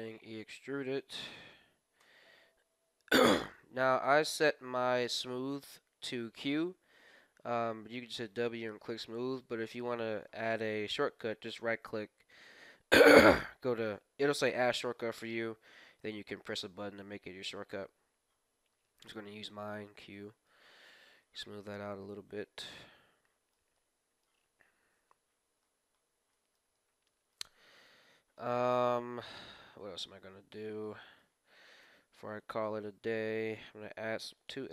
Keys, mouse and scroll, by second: 4.0 w, 19.0 q, 19.3 q, 20.1-22.9 middle drag, 21.0 z, 23.8 middle click, 24.4 KP_1, 25.3 scroll down 1, 26.3-32.7 middle drag, 31.8 ctrl+r, 33.0-34.6 middle drag, 34.0 ctrl+r.